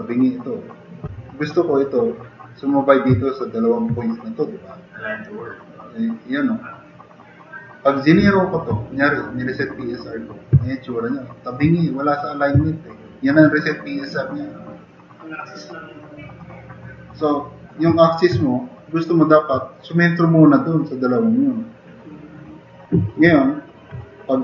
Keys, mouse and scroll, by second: 3.2 drag, 10.6 drag, 14.6-15.6 drag, 16.2 click, 16.9-17.6 drag, 18.4-19.3 drag, 23.3 drag.